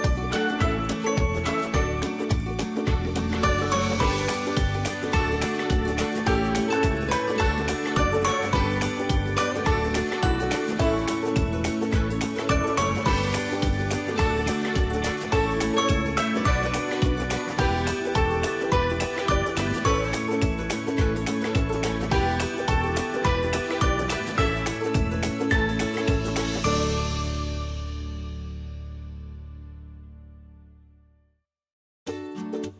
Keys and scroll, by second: 1.9 ctrl+0, 8.3 ctrl+0.